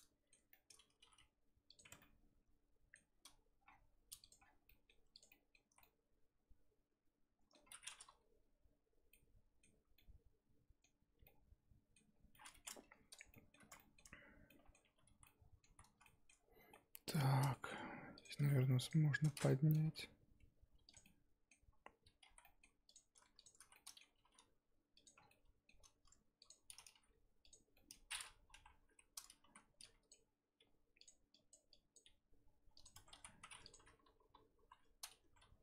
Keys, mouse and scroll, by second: 1.0 g, 1.9 Tab, 2.0-3.7 middle drag, 3.7-4.2 scroll down 3, 4.2 click, 4.7 middle click, 5.1 click, 5.3-5.6 scroll down 1, 5.6 z, 5.8-7.6 middle drag, 7.6-8.8 scroll up 7, 9.1-13.1 middle drag, 13.1 click, 13.3 shift+middle click, 14.0 Tab, 14.5 middle click, 14.8 1, 15.1 z, 15.2 middle click, 15.6 z, 16.0-18.1 shift+middle drag, 18.1 click, 18.8 shift+click, 19.7 g, 21.0-22.2 middle drag, 22.2 z, 22.4 middle click, 22.8 click, 23.3 shift+click, 23.6 z, 23.7 middle click, 24.2 g, 25.1 scroll down 3, 25.3 middle click, 25.7-26.3 scroll up 1, 26.4 click, 26.9 g, 27.7 middle click, 28.5 KP_3, 29.4 z, 29.8 click, 30.6 g, 31.3 click, 31.7 click, 32.0 g, 32.9 Tab, 33.1 z, 33.4 scroll down 1, 33.6 click, 34.0 End, 34.5 KP_7, 35.2 Tab, 35.4 a.